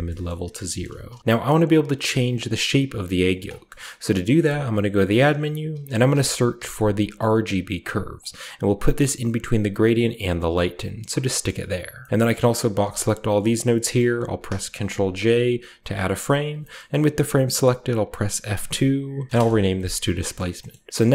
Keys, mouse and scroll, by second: 0.0-0.1 typing, 3.2 drag, 3.5-4.3 scroll down 2, 4.3-5.1 shift+scroll down 1, 4.3 typing, 5.1 click, 5.6-6.5 typing, 8.1 click, 9.9 click, 10.2 click, 10.7 click, 12.1-12.5 scroll down 1, 12.5 click, 13.5-14.9 scroll up 2, 14.2 ctrl+j, 14.9 click, 15.2 a, 15.4 click, 16.0 click, 16.5-17.2 scroll up 2, 16.5-18.4 drag, 16.5 typing, 17.2-18.4 scroll up 1, 18.4 F3, 19.3 Return, 19.3-20.1 typing, 19.9-21.1 scroll up 1, 20.3 middle click, 20.6 middle click, 21.0-21.1 middle drag.